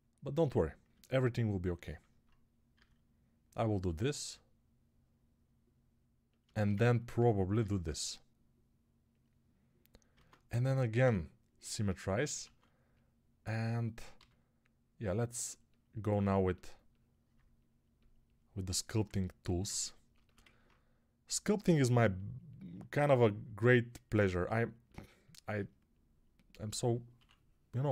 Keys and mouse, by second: 2.6 e, 7.4 e, 10.0 ctrl+Tab, 10.9 q, 12.3 alt+q, 14.0 g, 16.0-27.9 ctrl+alt+drag, 27.0 6.